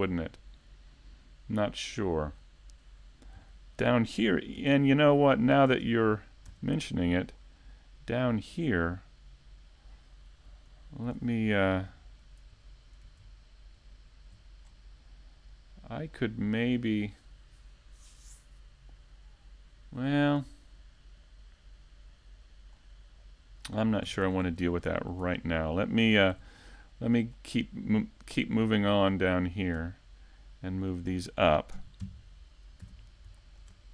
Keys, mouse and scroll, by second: 0.4 middle click, 3.1 click, 4.1 click, 5.1 click, 5.4 middle click, 6.1 shift+middle click, 6.5 scroll up 1, 6.8 middle click, 8.4 Tab, 9.1 ctrl+r, 10.5 click, 13.3 click, 13.9 ctrl+r, 15.5 click, 17.3 click, 19.2 click, 19.7 right click, 20.5 ctrl+Tab, 21.1 right click, 21.5 middle click, 24.2 click, 24.7 scroll, 26.1 click, 26.7 middle click, 27.9-28.9 scroll, 29.7 click, 29.9 middle click, 31.2 click, 32.8 Tab, 33.1 scroll down 2, 33.4 middle click.